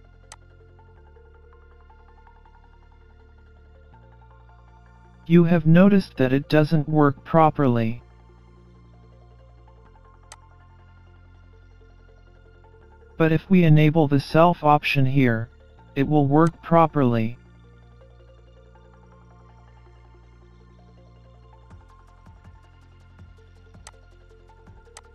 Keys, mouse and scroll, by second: 0.0 click, 1.8 click, 2.7 click, 3.9 click, 10.6-11.1 scroll down 4, 10.9-11.7 scroll up 9, 11.7 middle click, 13.9 click, 17.4-17.8 scroll up 1, 17.8 middle click, 20.1 click, 21.1 middle click, 23.5-24.0 scroll down 4, 23.9 scroll up 3, 24.3 middle click.